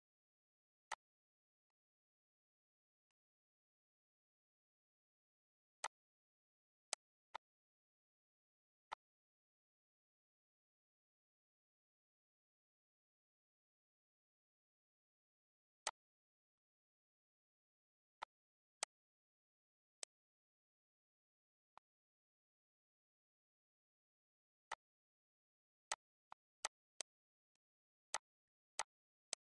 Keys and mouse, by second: 0.0 click, 0.7 click, 1.4 click, 2.7 click, 5.6 click, 6.6 click, 8.7 click, 10.9 click, 13.6 ctrl+x, 15.3 click, 16.4 click, 18.1 right click, 18.7 click, 19.8 click, 21.3 click, 24.5 click, 25.7 shift+click, 26.3 shift+click, 27.9 shift+click, 28.2 shift+click.